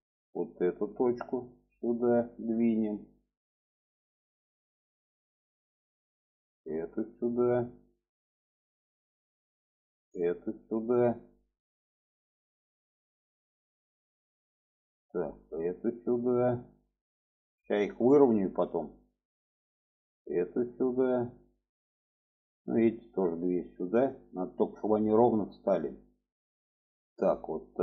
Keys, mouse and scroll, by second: 0.3 click, 1.6-5.6 drag, 6.4-6.7 drag, 7.2-8.4 drag, 9.1 click, 10.0-12.5 drag, 14.6 click, 15.4-17.9 drag, 18.8 click, 19.7-21.3 drag, 22.1 click, 23.1 click, 24.6 shift+middle click, 25.2 click, 25.8 click, 26.7-27.8 drag.